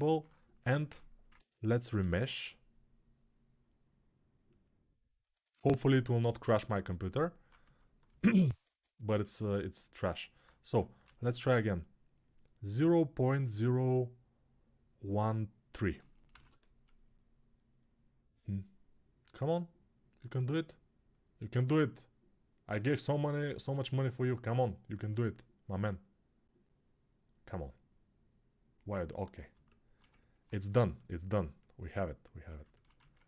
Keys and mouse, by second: 1.7 shift+r, 6.8 ctrl+r, 6.8-33.2 right drag, 8.6 ctrl+z, 10.8 shift+r.